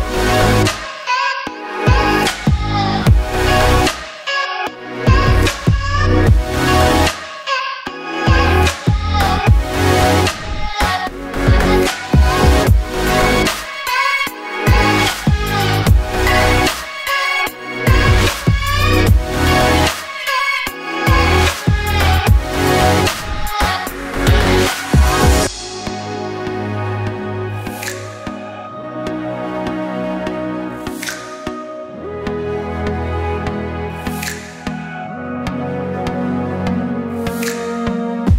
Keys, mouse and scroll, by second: 0.0-0.6 scroll up 1, 0.6-3.6 shift+middle drag, 0.8 scroll up 1, 2.0-3.3 scroll down 1, 3.6 click, 4.3 2, 4.7 click, 4.8 scroll up 1, 5.1-9.0 shift+middle drag, 5.5 ctrl+r, 8.3 s, 9.0 ctrl+z, 9.7 click, 10.2 s, 11.9 click, 12.4 ctrl+r, 14.5 s, 16.7-19.8 shift+middle drag, 17.7 g, 19.8-21.6 scroll down 2, 21.6-22.1 scroll down 1, 22.1 click, 22.3 scroll up 2, 23.2 g, 24.0 click, 24.1 ctrl+z, 24.6 click, 25.1 g, 29.4 click, 29.6 g, 31.2 ctrl+z, 32.1 click, 33.4 g, 33.8 click, 34.1 g, 35.2 click, 35.5 scroll down 1, 35.7-38.3 shift+middle drag, 37.2 KP_0.